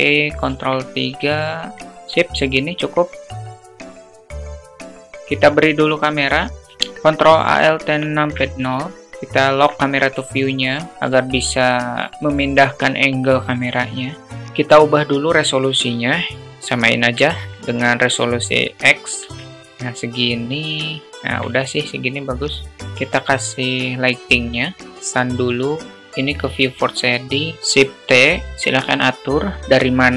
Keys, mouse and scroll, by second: 0.2 ctrl+3, 0.8 alt+middle click, 1.7 click, 1.8 s, 2.5 click, 3.2 ctrl+click, 3.6 g, 4.8 click, 5.2 shift+a, 7.4 ctrl+alt+KP_0, 8.3 q, 8.9 alt+shift+middle click, 14.3 click, 15.4-18.1 drag, 18.7 ctrl+click, 20.8 q, 22.4 `, 22.8 shift+a, 26.0 click, 26.8 click, 27.6 ctrl+shift+z, 27.6 shift+t.